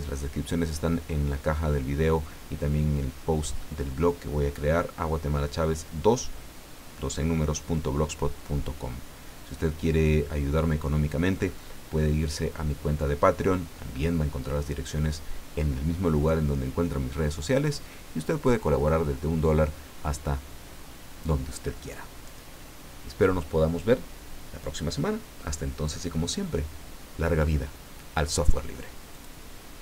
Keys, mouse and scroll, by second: 29.1 click.